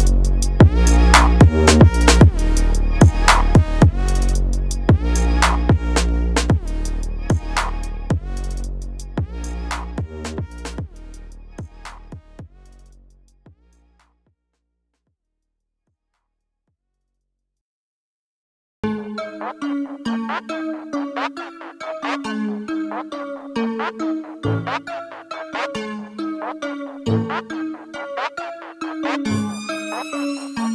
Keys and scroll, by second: 9.5 ctrl+s.